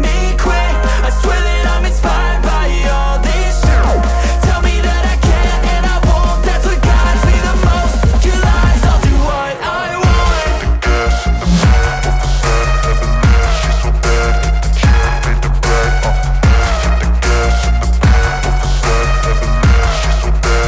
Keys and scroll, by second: 0.1 Return, 0.8-5.8 typing, 2.3 ctrl+BackSpace, 6.2 Return, 7.0-20.0 typing, 11.4 Return, 17.5 Return, 20.6 Return.